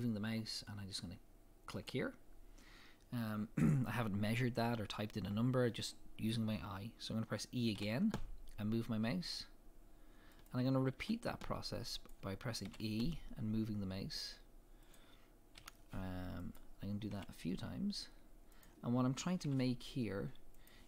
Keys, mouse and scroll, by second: 7.7 e, 10.4 click, 11.0 e, 12.1 click, 12.6 e, 14.9 click, 15.5 e, 16.5 click, 17.1 e, 18.6 click, 19.4 e, 20.6 click.